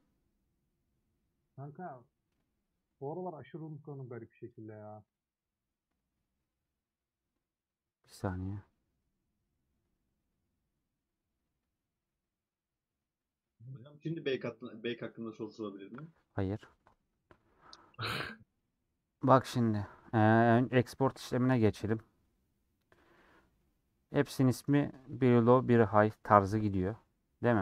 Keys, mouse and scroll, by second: 24.0 click, 24.4 scroll down 1, 26.9 click, 27.2-27.5 scroll up 1.